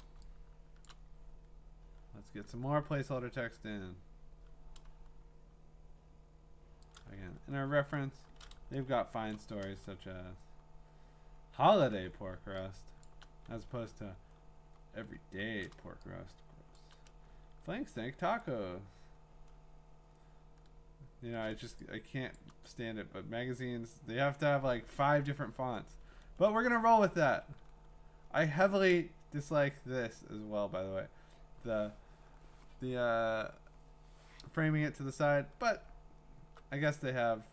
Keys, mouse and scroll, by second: 0.8 click, 3.1 scroll, 7.0 click, 7.3-8.2 scroll, 9.3 click, 9.7 scroll, 10.5-11.1 scroll, 12.3-15.1 scroll, 13.0 click, 16.7 click, 17.5-19.7 scroll, 20.1-20.8 scroll, 22.1-22.5 scroll, 22.4 click, 26.2-27.4 scroll, 27.6-29.5 scroll, 35.5-36.3 alt+scroll.